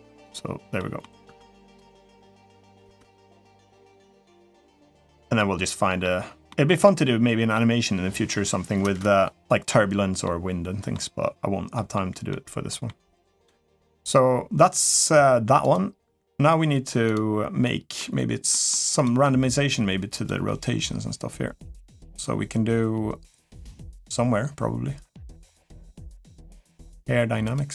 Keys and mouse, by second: 0.5 middle click, 1.0 Tab, 1.4 click, 1.9-2.3 middle drag, 2.6 space, 3.8-4.1 middle drag, 4.5-4.9 middle drag, 5.2-5.8 middle drag, 6.3-7.3 middle drag, 8.6 space, 10.0-10.7 middle drag, 11.5 middle click, 12.1-12.7 middle drag, 16.8 click, 17.4-17.8 middle drag, 18.3 middle click, 18.7 click, 20.0 click, 27.2 click.